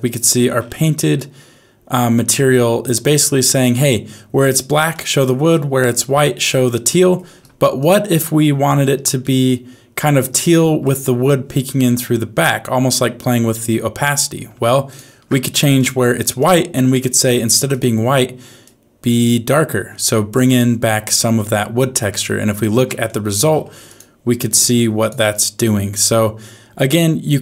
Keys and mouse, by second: 1.1-3.6 middle drag, 4.9 shift+middle click, 6.9 middle click, 7.8 ctrl+shift+click, 9.2-10.8 middle drag, 14.9 ctrl+shift+click, 21.4 middle click, 22.5 ctrl+shift+click, 23.1 middle click, 23.8 click.